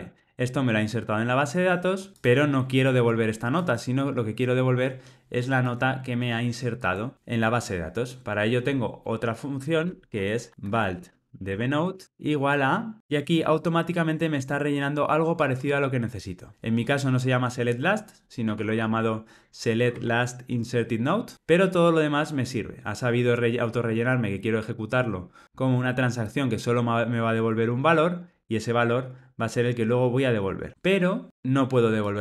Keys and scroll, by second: 15.5 Tab, 20.5 Tab.